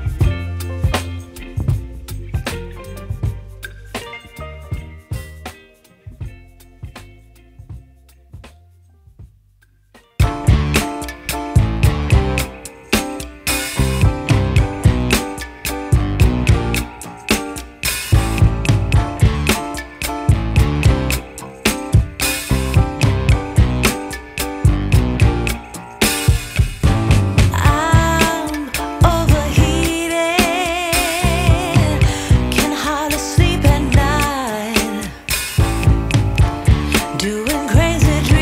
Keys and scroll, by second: 11.0 b, 11.7 ], 13.1 0, 21.0 [, 22.1 [, 25.0 ], 26.9 ], 29.2 [, 32.4 [, 33.9 ], 36.3 ].